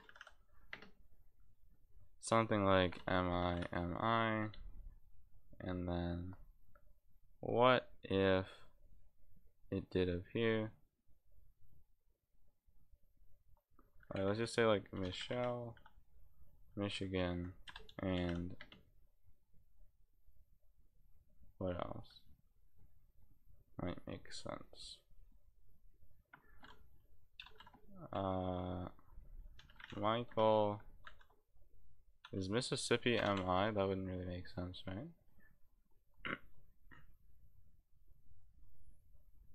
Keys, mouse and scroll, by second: 0.7 space, 3.4 space, 4.4 space, 15.2 e, 15.7 e, 18.6 space, 30.3 space.